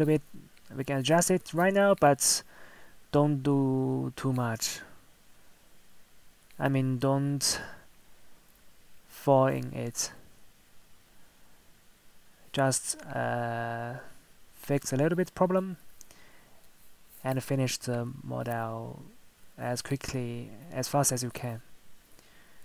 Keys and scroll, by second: 10.1 ctrl+z, 20.2 ctrl+z.